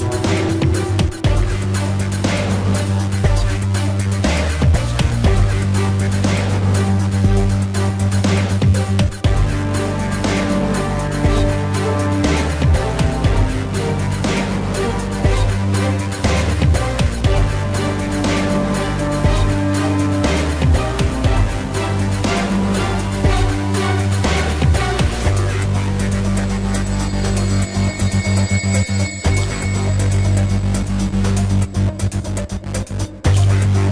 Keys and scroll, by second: 0.0-1.6 typing, 5.3 space, 7.3 space, 8.6 space, 10.5 ctrl+-, 10.9 ctrl+-, 11.3 space, 11.5 ctrl+-, 11.7 space, 11.8 ctrl+-, 12.4 ctrl+-, 12.4 ], 16.2 space, 16.7 ], 17.9 space, 18.2 space, 19.7 space, 21.5 ctrl+alt+z, 22.4 space, 23.8 space, 26.3 ctrl+=, 26.9 ctrl+-, 27.1 space, 27.3 ctrl+-, 31.4 ], 31.7 space, 31.9 ], 32.7 ], 33.8 ctrl+-.